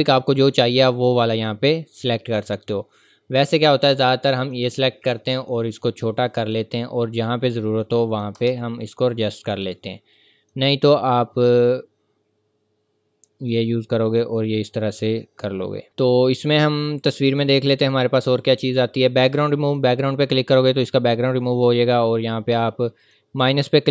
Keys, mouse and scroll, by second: 0.9 click, 4.4 click, 8.3 Return, 8.9 click, 13.4 click, 23.0 click.